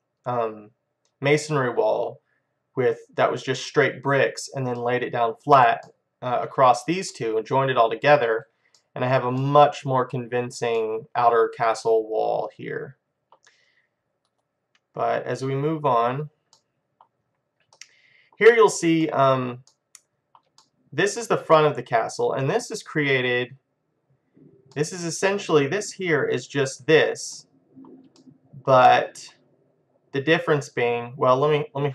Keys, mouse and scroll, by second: 4.9-13.7 middle drag, 15.7 click, 16.6-23.5 middle drag, 24.0-24.8 scroll down 1, 24.8-26.7 middle drag, 27.4-30.7 middle drag.